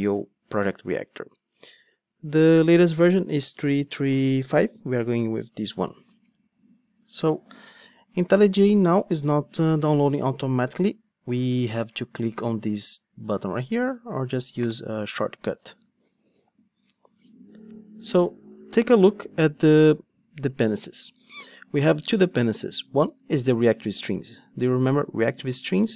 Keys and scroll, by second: 14.6 shift+super+i.